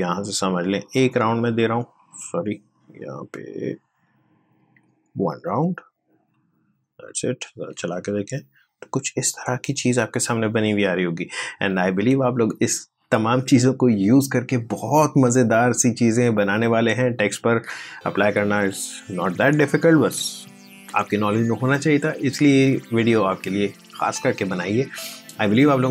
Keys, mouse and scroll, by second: 3.7 click, 5.3 1, 6.0 click, 7.5 space.